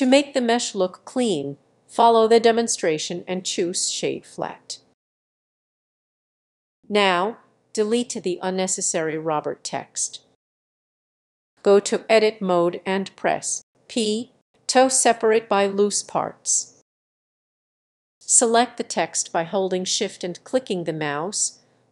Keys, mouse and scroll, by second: 0.6-5.3 drag, 5.3-6.5 scroll up 1, 6.5-7.2 scroll up 1, 7.2 scroll up 1, 7.4 click, 10.0 Delete, 10.4 middle drag, 10.6 click, 11.7 Tab, 12.9 p, 14.1 click, 15.0 Tab, 16.5-17.3 scroll up 1, 17.3-18.2 scroll up 1, 18.2 click, 19.1 shift+click, 19.3 shift+click, 19.5-21.9 shift+middle drag.